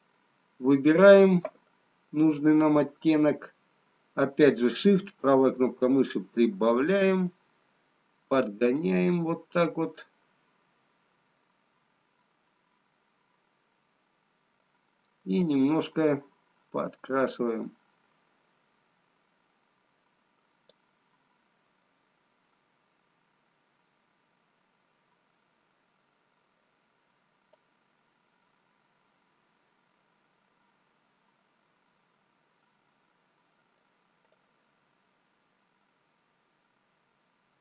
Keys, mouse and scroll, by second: 3.8 right click, 6.5 shift+right click, 22.2 middle click, 27.5 right click.